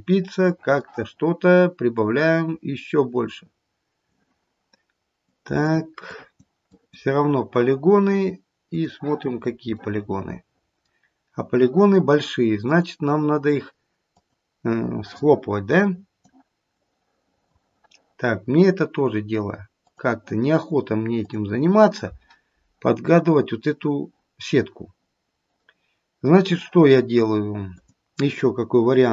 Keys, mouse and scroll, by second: 0.3 middle click, 0.6 middle click, 1.9 click, 5.2 click, 6.0 click, 6.7 click, 8.8 click, 9.3-9.9 scroll up 1, 9.9 middle click, 9.9-10.9 scroll up 2, 13.0 click, 16.6 click, 19.8 click, 27.9 click.